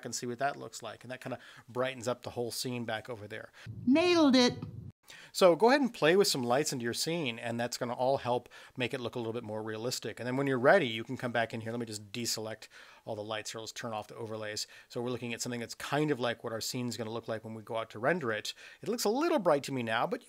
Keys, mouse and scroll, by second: 12.2 click, 14.0 click.